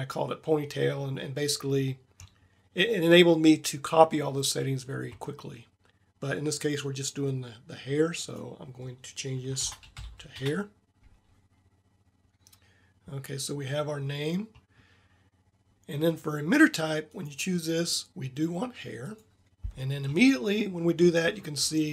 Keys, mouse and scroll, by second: 8.1-10.0 middle drag, 18.1 click.